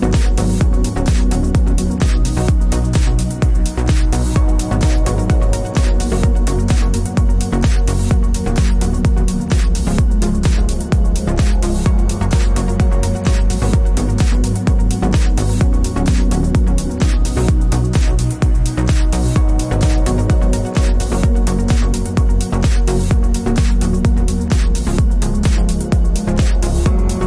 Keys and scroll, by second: 1.4 Tab, 25.2-27.2 typing.